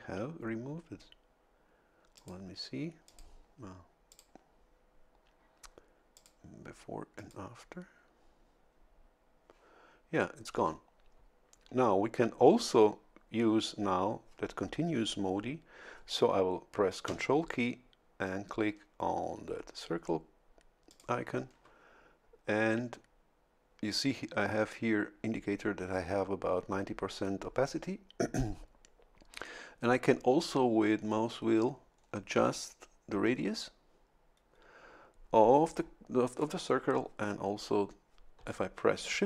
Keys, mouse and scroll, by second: 2.2 click, 3.1 click, 4.1 click, 6.1 click, 7.2 click, 20.9 ctrl+click, 31.0-31.3 scroll down 2, 31.9-32.3 scroll down 2, 33.5 scroll down 2.